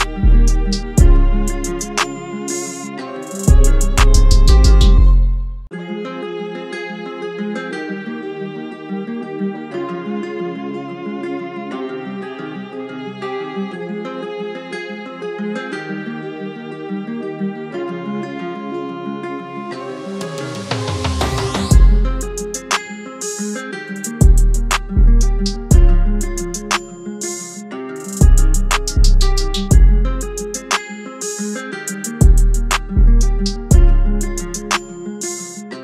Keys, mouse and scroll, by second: 0.7-4.2 [.